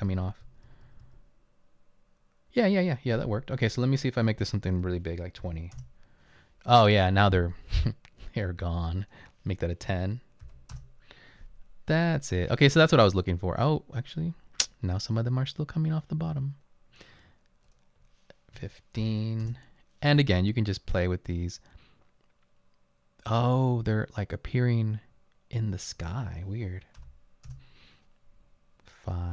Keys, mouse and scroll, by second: 0.0-1.5 typing, 4.8-5.4 typing, 5.8 Return, 9.8-10.6 typing, 10.8 Return, 15.7-16.4 typing, 18.6-19.0 typing, 19.5 Return, 27.0 5, 27.5 Return.